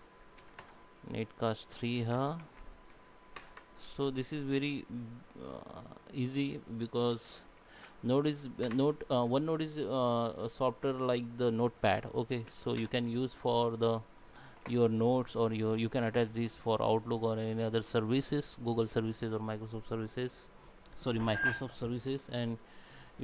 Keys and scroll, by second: 2.2 ctrl+a, 2.4 ctrl+v, 7.1 ctrl+a, 7.6 ctrl+v.